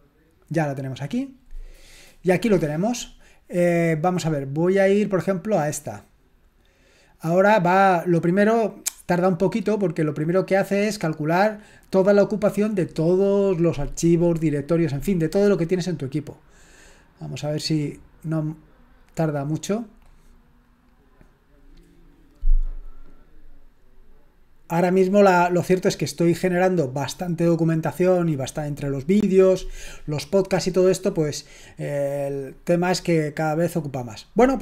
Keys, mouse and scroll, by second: 0.0-0.5 typing, 5.5 click, 10.4-11.5 drag, 19.0 click, 20.7 click.